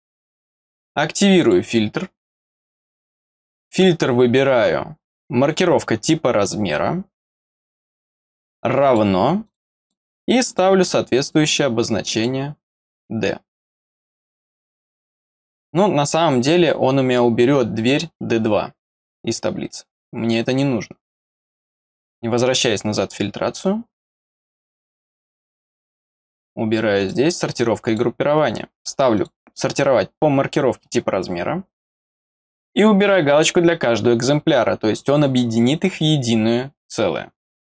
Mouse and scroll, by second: 1.4 click, 3.3 click, 5.4 click, 8.3 click, 8.8 click, 9.4 click, 9.8 click, 10.4 click, 12.1 click, 17.7 click, 21.2 click, 24.0 click, 24.4 click, 25.0 click, 25.5 click, 26.0 click, 27.0 click, 27.8 click, 29.1 click, 33.3 click.